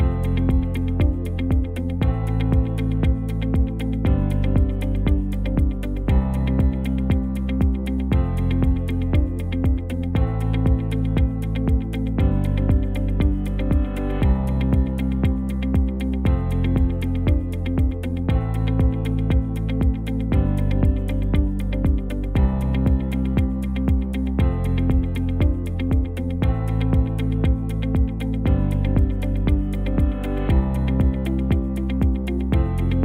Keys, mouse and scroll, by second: 2.8 middle click, 4.4 KP_3, 4.9 shift+z, 5.6 Tab, 6.6 click, 7.8 g, 10.0 click, 10.8 ctrl+x, 12.0 click, 13.6 click, 14.4 ctrl+x, 14.8 click, 15.7 g, 17.0 click, 17.4 g, 18.7 click, 19.1 g, 20.3 scroll down 1, 20.6 Tab, 20.8 middle click, 22.6 KP_3, 24.4 middle click, 27.7 scroll up 2, 28.2 shift+middle click, 30.5 shift+z, 31.2 click.